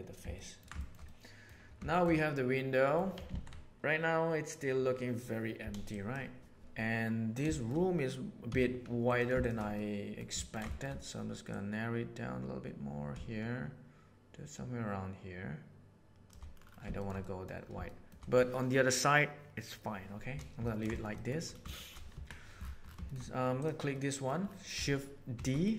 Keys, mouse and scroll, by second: 0.3 ctrl+middle click, 0.7 shift+middle click, 0.9 middle click, 1.9 shift+middle click, 2.1 middle click, 6.6 Tab, 6.8 middle click, 7.5 shift+middle click, 8.5 3, 9.7 middle click, 10.4 ctrl+middle click, 10.7 shift+middle click, 11.5-14.3 drag, 14.3-16.3 shift+middle drag, 17.0 shift+middle click, 17.2 middle click, 17.8 shift+middle click, 20.6 ctrl+middle click, 20.9 shift+middle click, 21.1 middle click, 21.7 shift+middle click, 22.1 Tab, 23.0 shift+middle drag, 23.9-24.2 middle drag, 25.3 shift+d.